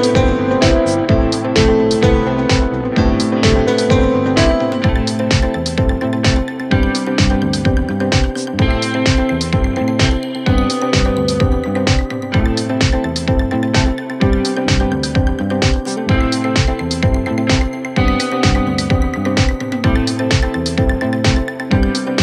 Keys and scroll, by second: 4.7 F3, 12.6 F3.